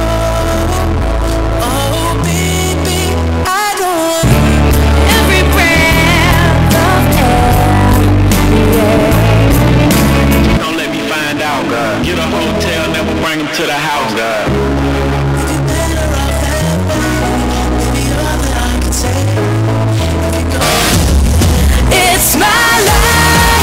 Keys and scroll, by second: 10.6 Page_Down.